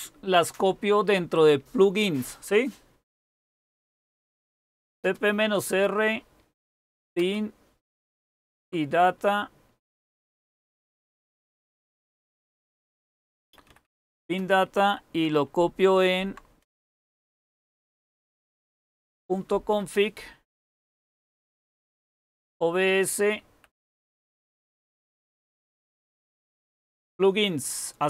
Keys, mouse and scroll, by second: 3.8-5.3 typing, 6.4-8.3 typing, 10.3 Left, 10.3 typing, 10.5 Left, 10.7 Left, 10.9 Left, 12.0 Right, 12.4 Tab, 12.6-14.7 typing, 15.9-16.6 typing, 17.7 Right, 18.2-19.6 typing, 21.4-23.9 typing, 23.9 Tab, 25.8-26.5 typing.